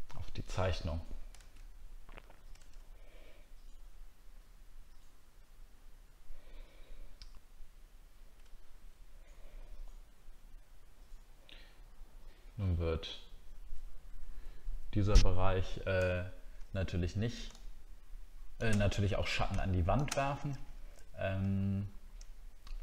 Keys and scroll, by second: 1.4 alt+Tab, 2.6 alt+Tab, 21.5 alt+scroll down 1.